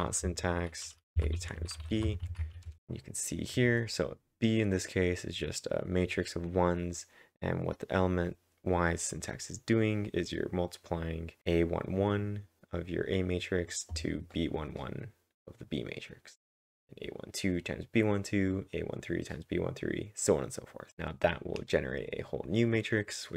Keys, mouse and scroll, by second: 0.0-2.4 typing, 2.7 Return.